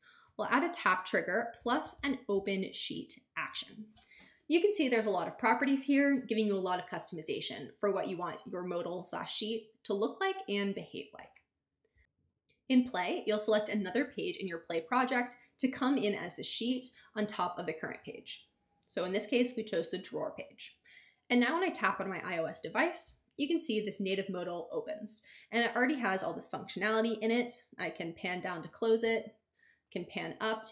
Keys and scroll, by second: 0.2 a, 1.3-2.5 typing.